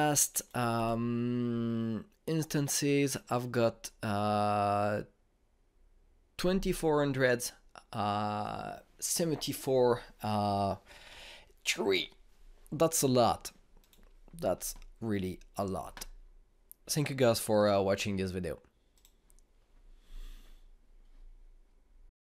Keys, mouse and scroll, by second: 14.6 click, 19.7 click, 22.0 typing.